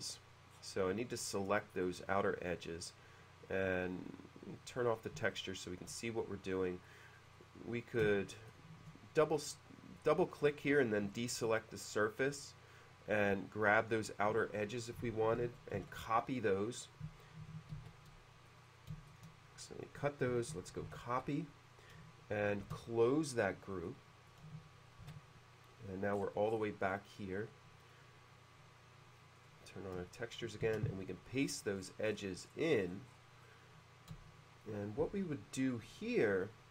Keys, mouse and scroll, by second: 0.6-0.9 scroll down 2, 1.9-3.9 middle drag, 4.9 click, 5.4-6.9 shift+middle drag, 7.2 click, 7.4 click, 9.3-10.0 middle drag, 11.2-12.5 shift+middle drag, 15.9 ctrl+x, 17.9 ctrl+z, 18.6 click, 18.7 click, 19.2 shift+click, 20.9 ctrl+c, 22.7 shift+c, 23.9 middle click, 25.1 shift+c, 26.2-26.8 scroll up 2, 27.0-28.0 middle drag, 29.5 click, 30.2 shift+middle click, 30.9 shift+v, 31.5-32.4 scroll up 2, 33.5-34.7 middle drag.